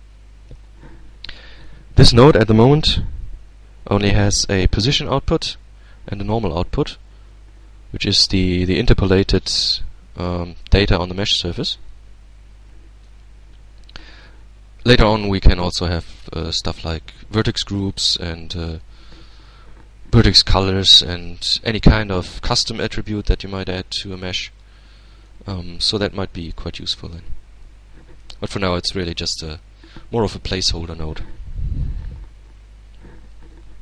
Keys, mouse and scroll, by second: 2.6-3.1 scroll up 1, 7.3-7.8 scroll up 2, 8.2-10.4 middle drag, 10.1 z, 11.2-12.8 middle drag, 13.4-16.3 drag, 19.9-24.3 drag, 24.6-25.6 middle drag, 25.9-27.9 middle drag, 28.6-30.0 drag.